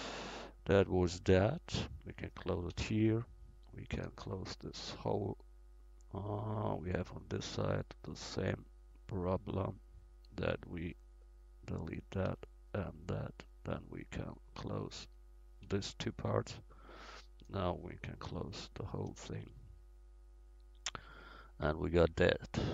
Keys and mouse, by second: 2.8 f, 5.9 middle click, 6.9 middle click, 9.1-17.1 right drag, 10.3 x, 12.3 x, 15.7 f, 17.1-18.8 drag, 18.4 f, 19.4 Tab.